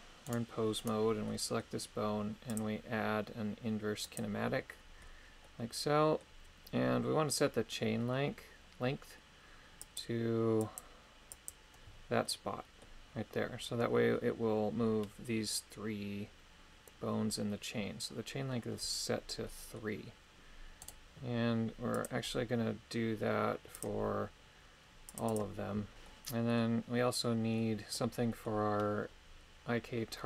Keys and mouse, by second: 0.3 right click, 0.8 right click, 1.3 middle click, 2.5-4.2 drag, 5.4 middle click, 9.9 click, 10.7 click, 11.3 click, 12.2 middle click, 19.4 middle click, 20.8 right click, 21.9-23.9 drag, 25.1 click, 25.3 click, 26.1 middle click, 27.0 middle click, 27.6 middle click, 28.3 middle click.